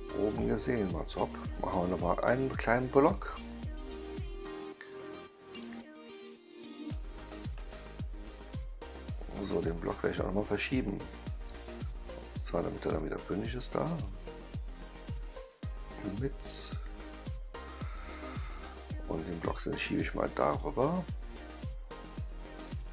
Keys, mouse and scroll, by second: 1.1 click, 2.8 click, 6.8 click, 7.5-9.0 right drag, 9.5 click, 10.8 click, 12.3-13.5 drag, 13.9-18.0 right drag, 19.2-21.0 drag, 21.4-22.6 right drag.